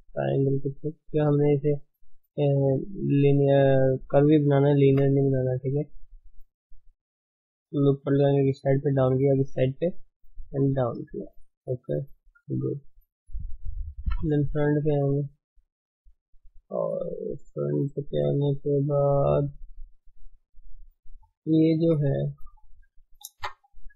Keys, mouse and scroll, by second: 1.0 g, 4.8 ctrl+r, 10.5 g, 12.2 shift+z, 13.9 KP_1, 16.5-17.1 scroll down 8, 17.1 scroll up 1, 20.8-21.5 scroll up 8, 23.2 shift+z.